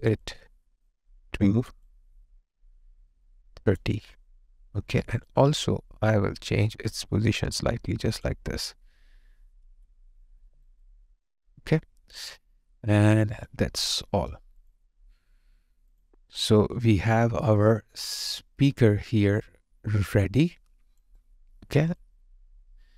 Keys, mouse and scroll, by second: 0.0 double click, 10.5 alt+right click, 10.8 alt+click, 16.4 alt+right click, 16.8 alt+click, 21.2 alt+right click, 22.0 alt+click.